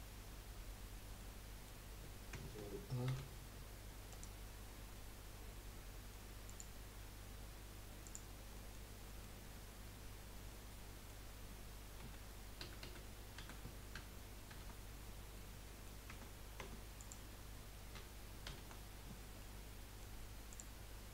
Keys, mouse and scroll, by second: 1.2 middle click, 6.5 click, 8.3 click, 8.5-9.4 middle drag, 9.4 Tab, 10.5-12.0 middle drag, 12.0 a, 12.6 a, 12.8 a, 13.4 a, 14.5 shift+n, 15.3 middle click, 16.1 Tab, 16.6 Tab, 17.0 click, 18.5 shift+n, 19.4-20.5 middle drag, 20.5 click.